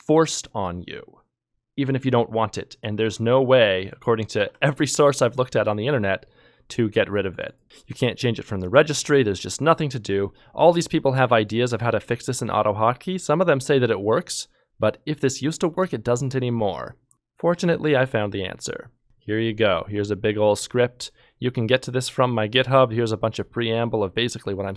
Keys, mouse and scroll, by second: 4.3 ctrl+Tab.